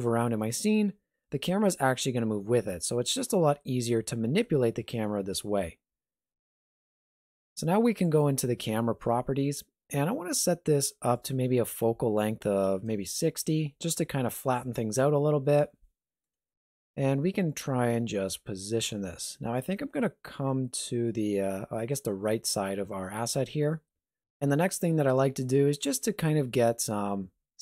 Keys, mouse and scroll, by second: 3.4 ctrl+middle click, 5.6 shift+middle click, 8.0 click, 15.5 middle click, 16.4 shift+middle click, 17.0 middle click, 17.6 shift+middle click, 19.9 ctrl+middle click, 20.6 shift+middle click, 23.3 middle click, 23.8 shift+middle click.